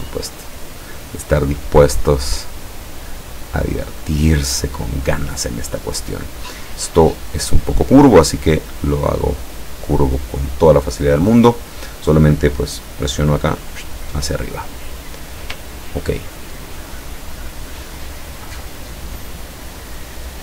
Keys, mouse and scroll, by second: 1.5 click, 1.9 click, 2.5-4.3 drag, 7.0-9.1 drag, 15.7-16.1 ctrl+scroll down 2, 17.4 click, 17.9 click.